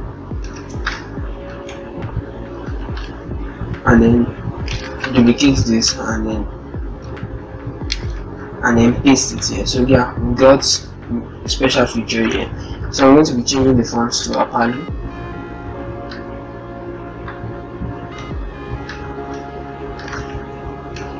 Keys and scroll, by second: 0.4 ctrl+shift+Return, 8.2 ctrl+a, 8.6 ctrl+v, 10.5 a.